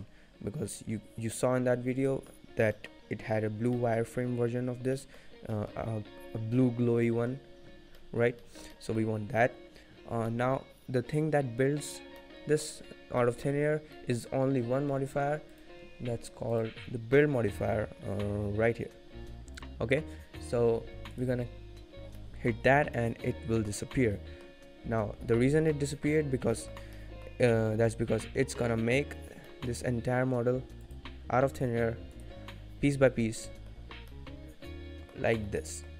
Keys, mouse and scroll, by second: 2.0 middle click, 2.4 scroll down 2, 2.7 middle click, 3.7 middle click, 4.7 scroll down 2, 4.9 middle click, 5.2-5.6 scroll up 5, 5.6 middle click, 6.8 scroll down 2, 7.3 middle click, 7.9 middle click, 8.4 shift+middle click, 8.7 middle click, 9.0-9.8 scroll up 1, 10.1 scroll up 1, 10.3 middle click, 12.1 middle click, 12.9 scroll down 2, 13.2 middle click, 13.9 middle click, 15.5 click, 16.5 click, 21.8-22.1 scroll down 5, 22.1 middle click, 22.5-22.9 scroll up 5, 22.9 middle click, 23.7 scroll down 2, 24.1 middle click, 24.6 scroll up 1, 25.3-25.7 scroll down 2, 25.7 middle click, 26.1-26.4 scroll up 4, 26.5 shift+middle click, 26.9 middle click, 28.0 scroll down 1, 28.2 middle click, 29.2 scroll down 3, 29.4 middle click, 30.9 click, 32.6 click, 33.3-33.7 scroll down 2, 33.4 middle click, 33.7-34.2 scroll up 5, 34.1 middle click, 35.7 scroll down 1.